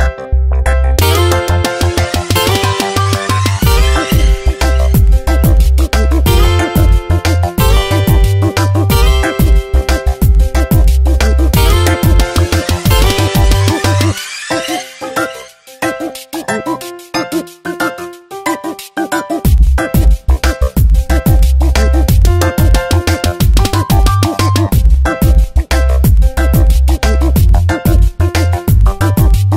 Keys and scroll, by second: 3.3 ctrl+Return, 3.8 Delete, 4.2 ctrl+d, 6.5 v, 8.2 p, 17.3 ctrl+Return, 17.8 Delete, 18.3 ctrl+d, 20.9 space, 24.2 ctrl+Return, 24.7 Delete, 25.1 ctrl+d, 27.1 space, 28.3 ctrl+w, 28.6 Return.